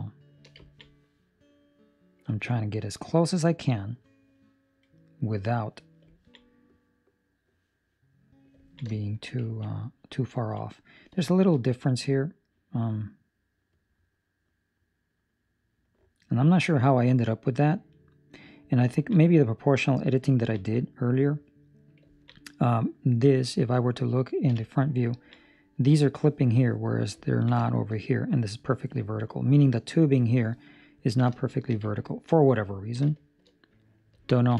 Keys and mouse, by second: 0.6 ctrl+middle click, 0.8 middle click, 2.2 ctrl+middle click, 6.0 ctrl+middle click, 6.3 middle click, 8.6 ctrl+middle click, 8.9 shift+middle click, 9.4 ctrl+middle click, 9.6 middle click, 10.3 ctrl+middle click, 10.7 middle click, 11.2 shift+middle click, 11.5 middle click, 18.8 ctrl+middle click, 19.2 middle click, 19.9 right click, 20.3 ctrl+middle click, 20.5 middle click, 22.0 ctrl+middle click, 22.3 middle click, 23.1 middle click, 24.4 KP_1, 25.0 ctrl+middle click, 26.0 shift+middle click, 27.2 ctrl+middle click, 27.5 shift+middle click, 30.8 ctrl+middle click, 31.3 shift+middle click, 31.8 ctrl+middle click, 32.8 ctrl+middle click, 33.0 shift+middle click, 34.2 ctrl+middle click.